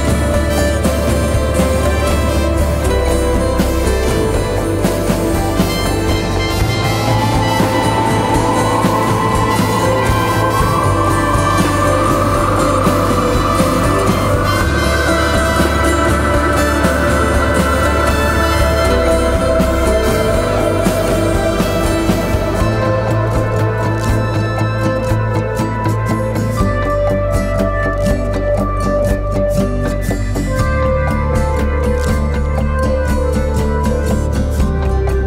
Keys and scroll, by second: 0.8 2, 6.4 ctrl+d, 6.4 Escape, 7.4 ], 9.4 4, 10.3 3, 11.2 4, 13.7 3, 14.1 ], 17.8 4, 20.5 shift+i, 24.9-27.8 typing, 30.7 Delete, 31.1 Delete.